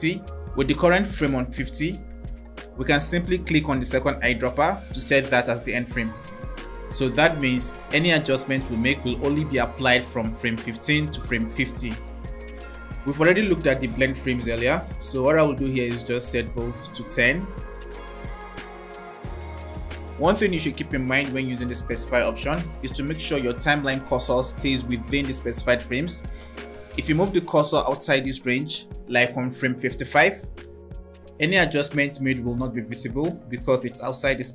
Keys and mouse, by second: 3.5 click, 16.0-18.1 drag, 18.3-19.7 drag, 28.3 click, 31.4 click.